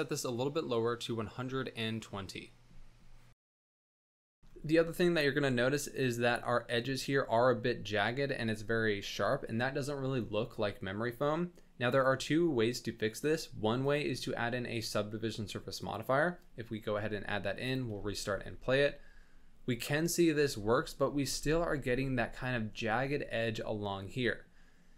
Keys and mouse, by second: 2.3 space, 4.1-4.4 drag, 13.8-16.0 drag, 17.7 click, 17.9 space, 18.4 shift+drag, 20.5 space, 20.8 shift+drag, 21.4 space.